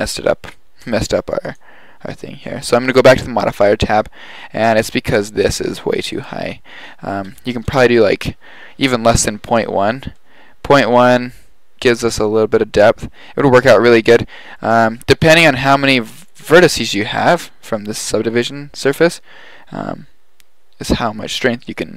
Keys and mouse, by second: 1.5-3.4 drag, 6.2-8.3 drag, 9.8-10.2 middle drag, 12.7 middle click, 12.9-14.5 middle drag.